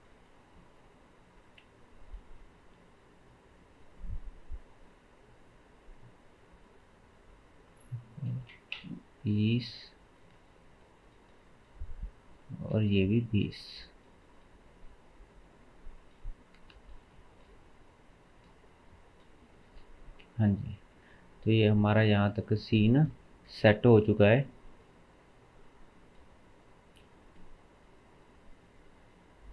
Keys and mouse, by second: 1.6-3.3 middle drag, 3.3-11.0 drag, 11.0-12.2 middle drag, 12.2-15.4 drag, 15.4-16.7 middle drag, 16.7 click, 16.8-20.6 middle drag, 17.6 m, 18.5 m, 20.6 click, 20.7 middle click, 22.1 click, 22.3-29.5 drag, 23.9 ctrl+s, 24.2 ctrl+s.